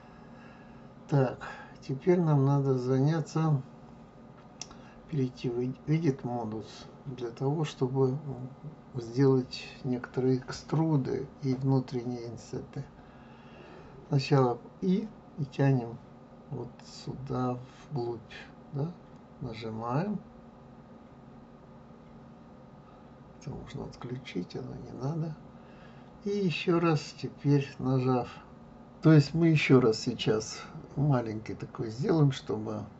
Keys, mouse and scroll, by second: 0.2 click, 4.7-7.7 drag, 23.3 click, 24.0 click, 27.2 click.